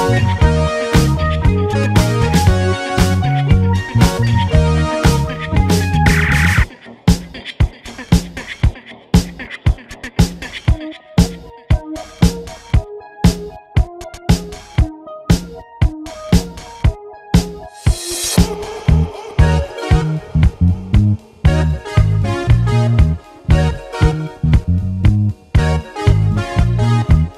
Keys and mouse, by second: 0.2 shift+click, 0.3 shift+click, 1.1 shift+click, 1.5 click, 2.1 shift+click, 2.2 Tab, 2.7 /, 2.7 3, 2.7 l, 4.3 s, 4.5 shift+click, 5.4 middle click, 6.2 Tab, 8.4 a, 15.8 shift+click, 16.0 Tab, 17.9 shift+click, 18.5 shift+click, 19.0 click, 19.0 2, 19.3 shift+click, 20.0 click, 21.1 shift+middle click, 21.5 shift+middle click, 22.3 middle click, 24.9 alt+shift+z, 24.9 click, 25.2 x, 26.1 alt+z, 26.9 shift+Tab, 27.0 click.